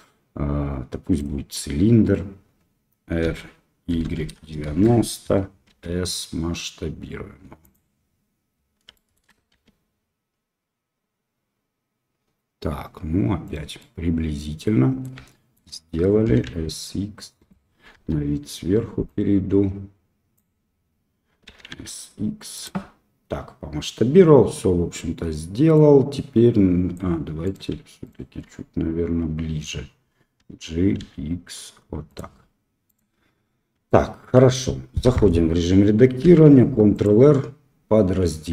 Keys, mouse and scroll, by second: 3.2 r, 5.6 s, 8.9 shift+middle click, 9.4 s, 13.7 drag, 13.8-15.0 middle drag, 15.2 shift+middle click, 16.2 s, 17.9 KP_7, 19.0-20.3 drag, 21.4 s, 25.7-26.9 drag, 27.4 click, 28.0-28.4 shift+drag, 30.3 g, 33.8 shift+middle click, 35.0 Tab, 36.2 ctrl+r.